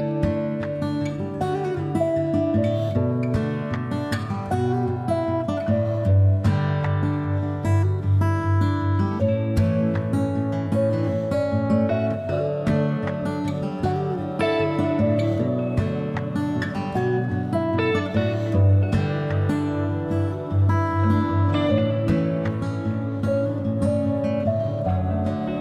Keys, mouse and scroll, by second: 1.6-10.5 drag, 1.6 e, 5.7 g, 11.6 e, 13.0-18.3 drag, 13.9 e, 18.6 KP_7, 19.7 click, 20.5 g, 21.8 click, 22.1 g, 23.5 click.